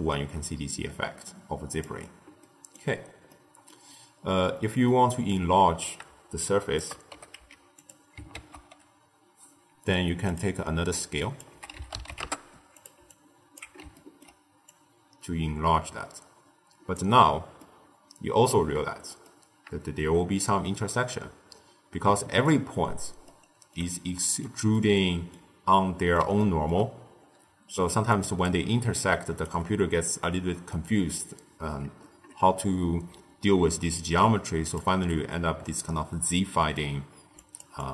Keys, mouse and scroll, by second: 2.4-2.9 middle drag, 2.9-3.2 scroll down 1, 3.2-4.1 middle drag, 4.1-4.5 scroll down 1, 4.5-5.2 middle drag, 5.2 drag, 6.3 shift+click, 7.0 g, 8.2 ctrl+a, 10.9 drag, 13.0 alt+click, 13.8 ctrl+middle click, 14.6-17.5 drag, 17.5-21.1 middle drag, 21.1 z, 22.0 z, 23.2-27.3 middle drag, 27.3 d, 27.9 d, 28.0 click, 28.4 d, 28.9 right click, 29.4 d, 32.8 z, 33.8 z, 35.3-35.9 scroll up 3, 35.9-37.3 middle drag, 37.3 click.